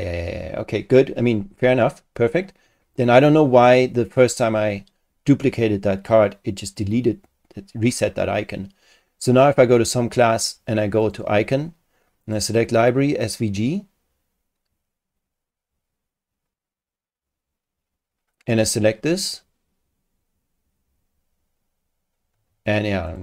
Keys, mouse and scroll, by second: 9.3 click, 11.0 click, 12.2 click, 13.2 click, 18.5 click, 23.1 click.